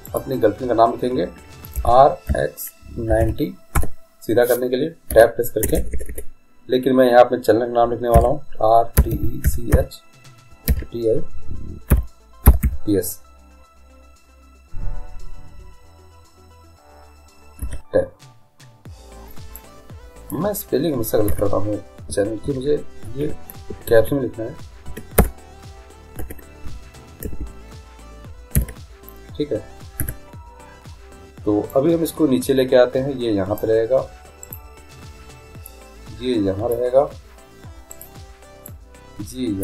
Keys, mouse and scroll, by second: 1.8 r, 5.1 Tab, 5.6-5.9 BackSpace, 6.1 BackSpace, 8.1-10.7 typing, 11.9 i, 12.4 p, 12.6 s, 17.6 Tab, 19.6-21.3 drag, 21.3 Tab, 22.5-23.2 Left, 23.7-24.0 Right, 24.9 Left, 25.2 \, 26.2 \, 26.7 BackSpace, 27.2 BackSpace, 27.5 BackSpace, 28.5 shift+t, 30.0 Tab, 31.7-33.6 drag, 34.4-36.4 right drag, 35.7-37.6 drag, 37.9-39.6 right drag, 38.6-39.6 drag.